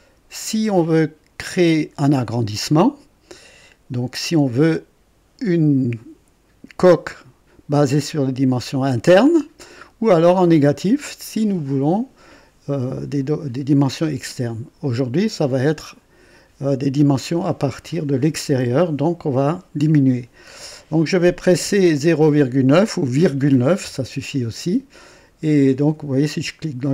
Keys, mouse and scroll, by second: 23.2 ,, 23.7 KP_9.